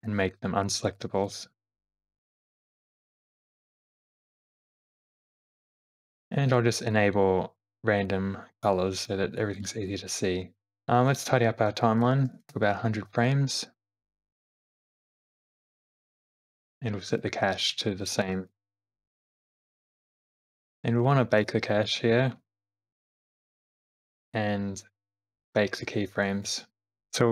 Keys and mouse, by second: 1.2 click, 1.6 space, 2.1 shift+click, 5.3 shift+middle click, 5.8 click, 6.9-8.9 drag, 9.0 click, 9.6 click, 10.7 Left, 11.1-12.9 drag, 12.2 0, 18.1-20.2 drag, 19.0 0, 21.6 click, 22.7 space, 23.1 space, 24.1 q, 26.9 Right, 26.9 Left, 27.1 Left.